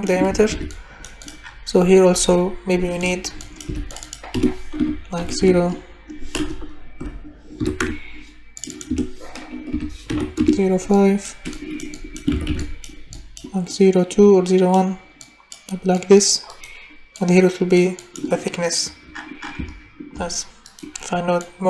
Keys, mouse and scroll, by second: 0.3 ctrl+c, 0.5 ctrl+v, 3.6 Delete, 4.3 0, 5.4 5, 6.4 BackSpace, 7.7 5, 7.8 Return, 8.8 0, 10.1 5, 10.4 Return, 12.1 click, 12.3 ctrl+c, 12.5 ctrl+v, 13.3 click, 13.9 click, 15.3 click, 16.0 click, 17.2 click, 21.3 click.